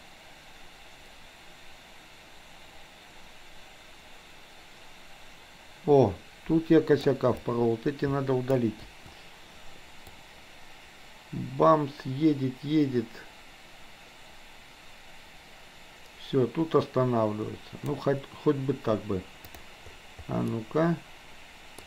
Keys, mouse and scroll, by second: 7.3-8.6 drag, 8.9 Delete, 10.2-17.9 drag, 20.6-21.8 middle drag.